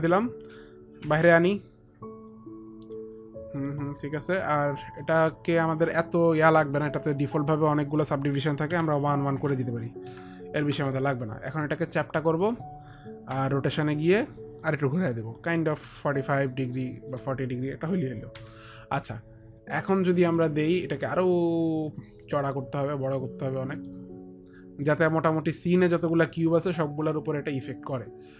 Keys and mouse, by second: 1.3 e, 2.6 click, 2.6 e, 3.0 e, 7.9 click, 8.9 KP_1, 9.6 Tab, 9.6 click, 9.6 KP_1, 11.0 Return, 12.0 Return, 12.0 Tab, 12.0 click, 12.0 KP_1, 13.6 r, 14.5 Return, 14.5 click, 14.5 r, 16.2 shift+r, 18.6 click, 18.6 e, 19.7 click, 21.2 click, 21.2 e, 23.5 click, 25.5 click.